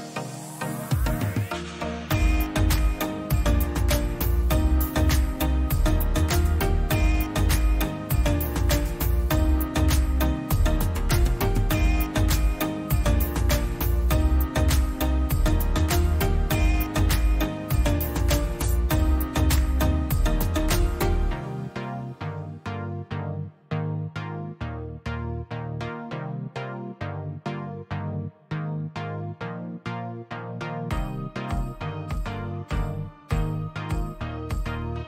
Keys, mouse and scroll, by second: 0.1 click, 4.3 click, 6.1 click, 6.3 click, 6.8 ctrl+v, 6.8-7.4 drag, 12.4 shift+click, 14.8 click, 16.7 click, 17.6-17.9 Left, 18.2 Left, 18.6 Left, 18.9 Left, 19.7 click, 20.4 click, 20.6 Down, 22.7-24.1 drag, 24.7 click, 25.3 ctrl+g, 27.1 shift+click, 27.9 shift+drag, 32.2-33.4 drag.